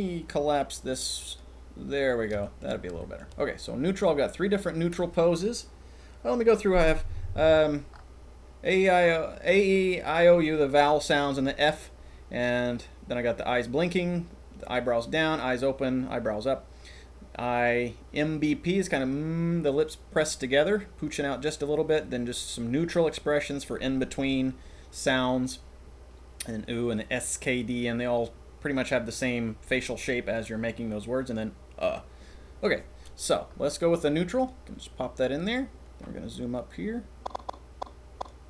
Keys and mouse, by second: 0.8 click, 2.4 shift+click, 2.4 shift+middle click, 2.9-3.3 shift+middle drag, 36.0-38.3 drag.